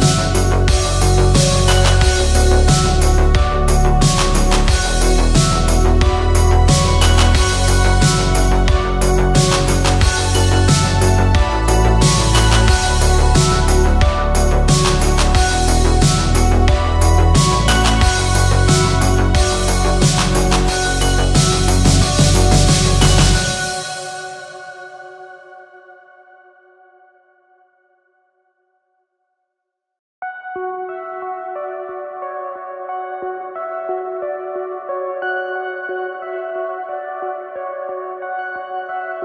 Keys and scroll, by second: 7.3-12.8 typing, 21.1 ctrl+z, 25.3-31.3 typing, 34.0 ctrl+a.